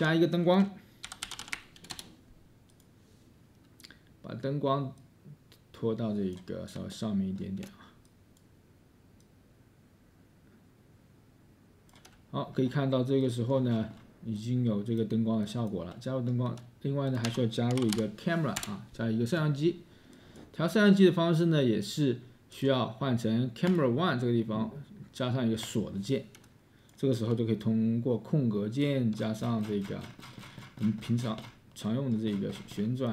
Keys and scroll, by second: 0.8-2.2 typing, 12.2 s, 13.3 space, 14.6-15.7 space, 17.4 Tab, 17.4-19.9 typing.